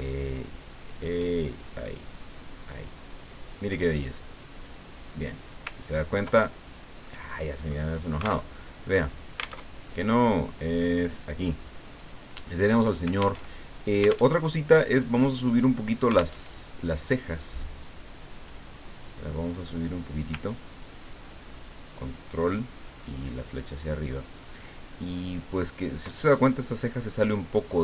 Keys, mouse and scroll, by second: 0.8 shift+click, 1.4-4.2 shift+drag, 4.6 click, 5.9-6.3 ctrl+scroll down 2, 7.0 middle click, 8.5 alt+Tab, 9.6 alt+Tab, 11.1 click, 13.4 alt+Tab, 14.3 alt+Tab, 16.4 alt+Tab, 17.4-18.9 drag, 20.6-26.3 ctrl+drag, 26.3 ctrl+click.